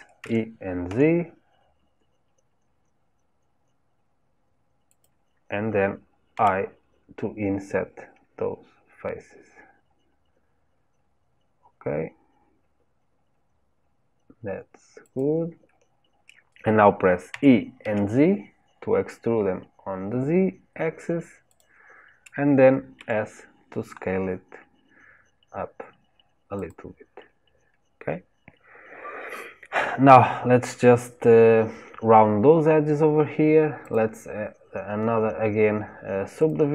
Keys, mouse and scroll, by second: 27.2-28.5 scroll down 2, 28.5-29.5 scroll up 2, 29.5-31.9 scroll up 1, 33.8-36.7 drag.